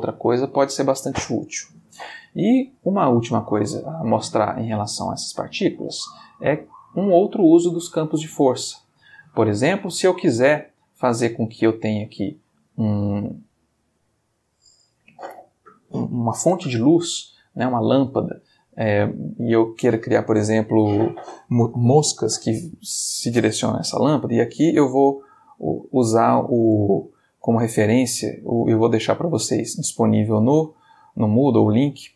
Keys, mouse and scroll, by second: 3.1 click, 5.4 click, 6.6 click, 7.8-10.0 middle drag, 10.4 click, 12.2-12.7 shift+middle drag, 24.6 alt+Tab, 25.7 alt+Tab, 29.0-32.1 drag.